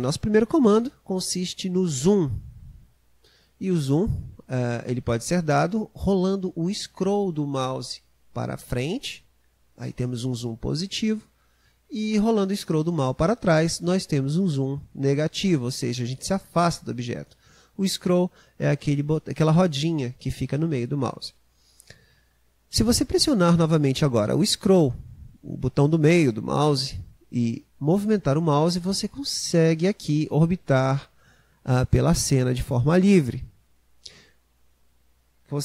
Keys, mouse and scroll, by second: 8.4 scroll up 1, 11.7 scroll down 1, 23.8-26.8 middle drag.